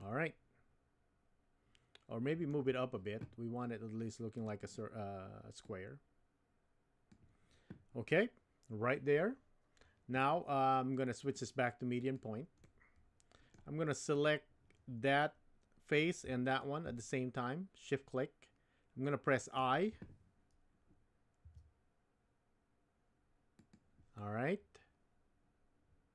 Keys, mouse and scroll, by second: 0.1-2.5 middle drag, 5.7-8.7 drag, 11.2-12.2 drag, 12.6 middle click, 14.1 click, 15.2 middle click, 16.9-19.6 middle drag, 21.4 i, 24.1-26.1 middle drag.